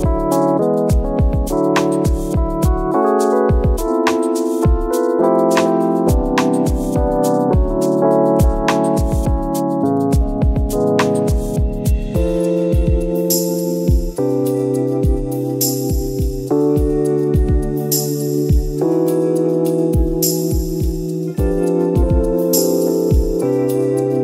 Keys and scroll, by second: 1.5 Delete, 15.6 ctrl+d.